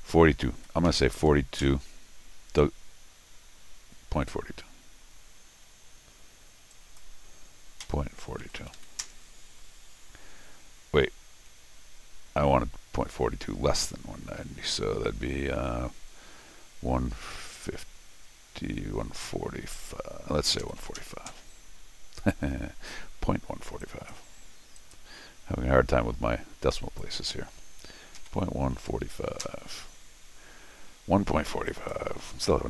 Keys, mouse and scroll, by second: 6.7 click, 7.8 ., 8.4 4, 8.7 2, 9.0 Return, 17.5 click, 23.8 click, 24.7 click, 26.7 click, 27.9-29.5 typing, 31.7 click, 32.4-32.6 typing.